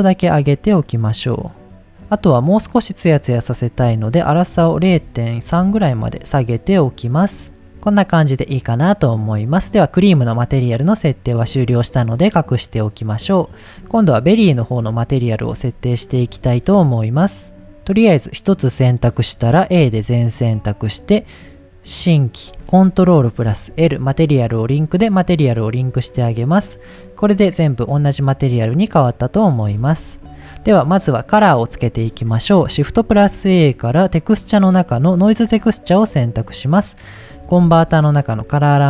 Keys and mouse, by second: 3.4-6.4 drag, 7.1 click, 7.4 middle drag, 11.8 click, 12.6 click, 17.1 drag, 19.8 a, 22.1 click, 23.4 ctrl+l, 26.8 middle click, 29.5 click, 29.8 ctrl+z, 32.0 middle click, 33.1 shift+a, 37.6 shift+a.